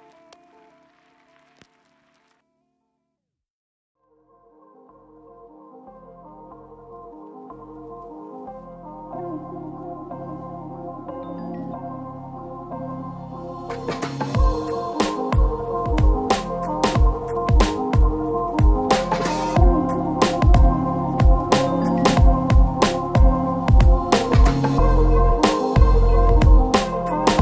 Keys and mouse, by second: 0.1 shift+z, 0.2 a, 0.6 shift+click, 0.6 KP_1, 1.0 shift+click, 1.4 middle click, 1.7 KP_1, 2.3 middle click, 2.3 Tab, 2.5 Tab, 2.5 shift+click, 2.7 middle click, 2.9 Tab, 3.3 ctrl+click, 3.9 f, 4.1 y, 4.3 g, 4.5 ctrl+click, 4.6 middle click, 4.7 shift+click, 5.3 Tab, 5.9 ctrl+r, 6.0 ctrl+r, 6.0 ctrl+click, 6.1 ctrl+r, 6.4 alt+shift+click, 6.8 shift+click, 7.7 Tab, 7.7 middle click, 7.9 a, 8.1 middle click, 8.5 shift+a, 9.1 shift+a, 9.4 middle click, 9.6 Tab, 9.8 KP_1, 10.0 shift+click, 10.0 Tab, 10.0 middle click, 10.1 ctrl+click, 10.2 ctrl+r, 10.2 middle click, 10.7 ctrl+click, 10.8 middle click, 11.0 ctrl+click, 11.8 a, 12.0 alt+x, 13.0 ctrl+x, 13.0 Tab, 13.2 a, 14.0 Tab, 14.1 ctrl+b, 14.1 ctrl+click, 14.9 Tab, 15.5-18.1 typing, 16.0 shift+click, 17.4 shift+click, 18.1 shift+click, 18.6 Tab, 18.8 shift+click, 19.2 Tab, 19.3 shift+click, 19.8 i, 19.8 shift+click, 20.0 shift+middle click, 20.8 e, 21.0 s, 21.4 ctrl+z, 21.6 click, 21.6 s, 21.8 ctrl+middle click, 22.0 ctrl+z, 22.8-24.7 typing, 22.9 ctrl+z, 22.9 ctrl+click, 23.0 shift+middle click, 24.3 ctrl+z, 24.8 shift+click, 25.1 Tab, 25.3 middle click, 25.4 middle click, 25.6 middle click, 25.9 g, 26.1 ctrl+shift+click, 26.2 ctrl+z, 26.4 g, 26.5 shift+click, 27.0 shift+click.